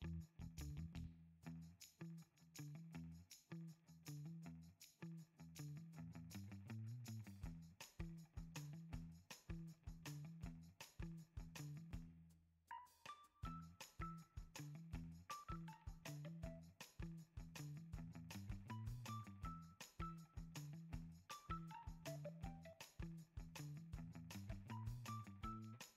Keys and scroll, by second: 0.6-2.6 typing, 4.5 x, 8.0 super+c, 8.5 super+v, 9.0 x, 10.2 z, 10.2 alt+x, 19.0 x, 21.6 alt+x, 24.8-25.9 typing.